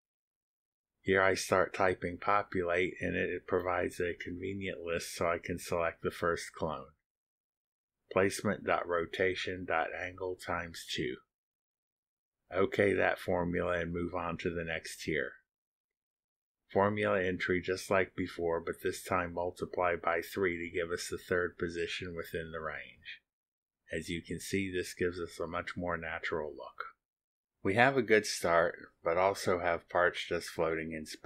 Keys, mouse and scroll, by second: 0.8 n, 2.2 Down, 4.1 Return, 6.6 shift+8, 7.9 click, 9.3 shift+8, 11.2 KP_Enter, 11.9 click, 12.7 click, 14.9 click, 15.7 click, 16.1 click, 16.4-17.3 typing, 17.3 Down, 18.9-21.6 typing, 20.5 Down, 21.8 Return, 22.6 click, 23.0 click, 23.3-23.6 drag, 24.0 scroll up 1, 24.1-26.8 drag, 27.8 click, 27.8-28.7 scroll down 1, 28.7-29.6 drag, 29.6 middle click, 29.8-31.2 drag.